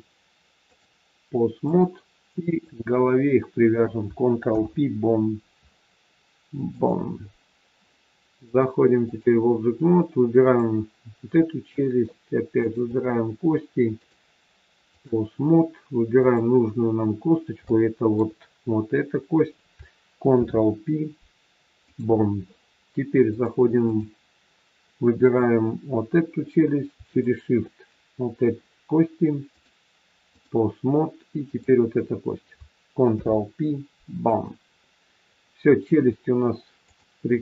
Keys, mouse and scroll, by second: 0.7 click, 2.4 click, 4.5 ctrl+p, 8.3 click, 10.4 click, 12.5 shift+click, 13.9 click, 16.1 click, 17.1-17.6 scroll up 3, 17.6 shift+middle click, 20.3 ctrl+p, 23.3 click, 25.1 click, 27.1 shift+click, 27.4 shift+click, 29.4 click, 31.4 click, 33.0 ctrl+p, 35.2-35.5 scroll down 3, 36.9 click.